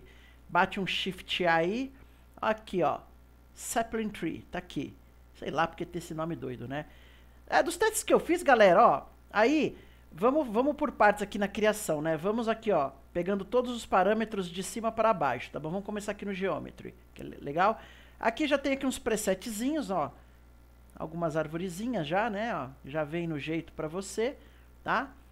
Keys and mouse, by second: 11.9-15.1 drag, 19.7-25.3 drag.